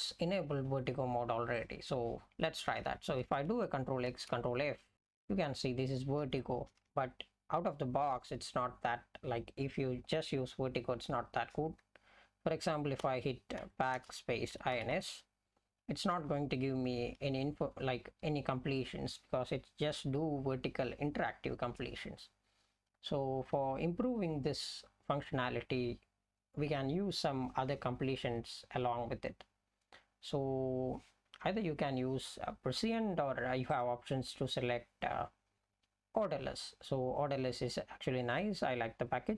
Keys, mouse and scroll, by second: 1.6 click, 3.4 click, 4.1 ctrl+f, 4.9 ctrl+f, 6.2 Down, 6.7 Down, 6.9 alt+x, 13.0-15.4 typing, 16.9 BackSpace, 17.4 BackSpace, 17.5 BackSpace, 17.7 BackSpace, 19.2 BackSpace.